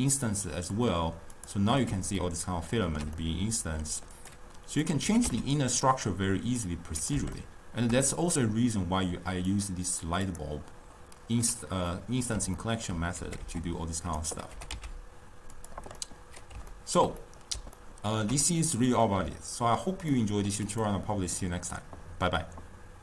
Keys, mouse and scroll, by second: 0.8 click, 1.4 click, 2.3-4.2 ctrl+middle drag, 4.2 click, 4.8 click, 5.1 g, 7.5-9.6 shift+middle drag, 9.6 click, 10.3 click, 12.0-13.3 middle drag, 13.3 g, 14.6 g, 16.0-20.8 middle drag, 20.8 click.